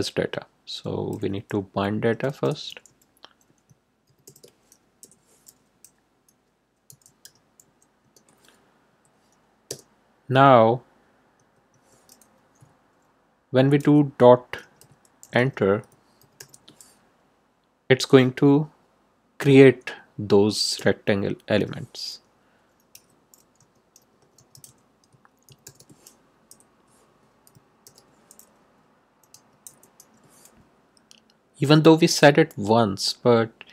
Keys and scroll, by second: 1.1-4.7 typing, 4.9 Left, 6.8 m, 7.2 y, 8.0 Return, 8.9 Right, 9.6 Return, 11.3 Tab, 13.8-16.8 typing, 20.7 Return, 21.0 Tab, 22.9-26.1 typing, 26.4 Left, 27.8 shift+', 28.9-30.4 typing.